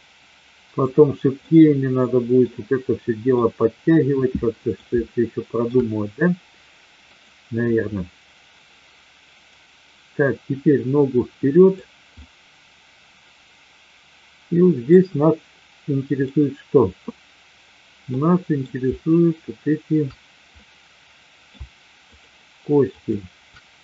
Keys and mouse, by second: 1.4-2.4 middle drag, 3.4-4.7 middle drag, 5.0-5.7 shift+middle drag, 7.1 click, 9.4-11.7 drag, 12.2-14.8 middle drag, 18.1-18.6 middle drag, 20.6-21.4 middle drag, 22.1-23.0 shift+drag.